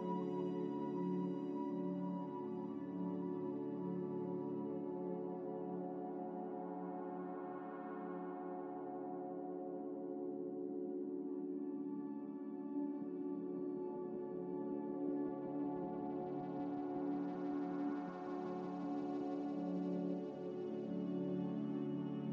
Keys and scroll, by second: 7.0 q, 8.5 ctrl+j, 10.1 3, 14.2 5, 20.0 1.